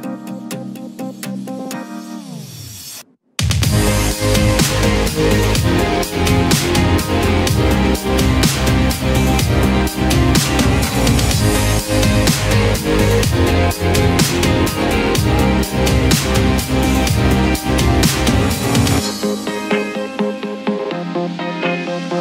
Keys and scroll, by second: 0.0 ctrl+u, 3.5 ctrl+c, 3.6 ctrl+v, 9.1 ctrl+d.